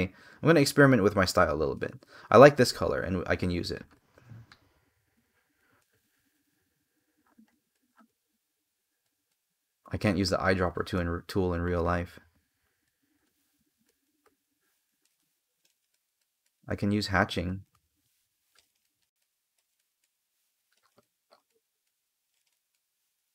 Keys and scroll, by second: 1.4 space, 5.5 space, 10.6 space, 14.8 space, 23.1 space.